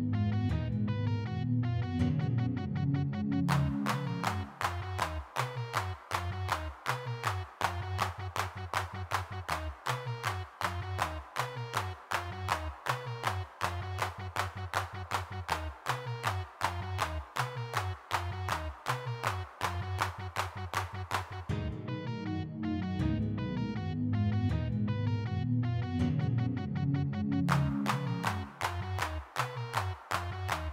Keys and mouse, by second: 0.1-3.7 drag, 3.7-5.8 middle drag, 5.8 click, 6.7-10.8 drag, 11.0-15.8 middle drag, 16.5 middle click, 17.3 middle click, 18.6 middle click, 19.1-21.9 drag, 24.4 g, 24.4 f, 24.6-25.8 drag, 27.3 click, 28.5-30.7 drag.